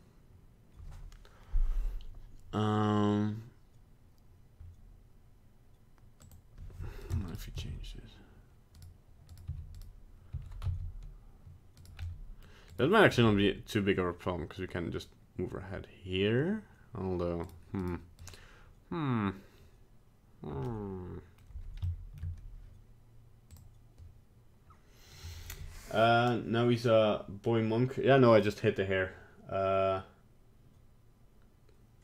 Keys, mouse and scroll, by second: 6.3 click, 7.1 right click, 7.4 right click, 7.6 g, 9.4 right click, 9.5 r, 10.4 r, 12.0 middle click, 12.4 middle click, 12.8 right click, 13.2 g, 17.9 right click, 18.3 right click, 20.7 middle click, 21.4 middle click, 21.9 shift+middle click, 22.0 shift+middle click, 23.5 click.